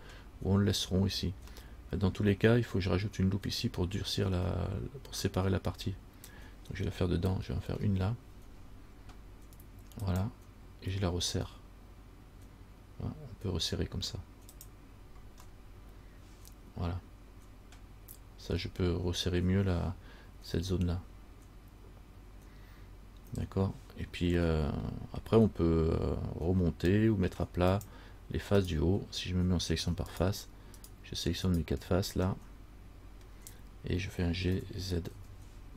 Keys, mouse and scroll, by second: 1.9 middle click, 7.8 ctrl+r, 15.7 middle click, 24.5 scroll up 1, 24.7 middle click, 28.1 click, 28.8 right click, 30.3 shift+right click, 31.0 shift+right click, 31.6 right click, 32.5 middle click, 33.5-34.2 scroll down 1, 34.7 g.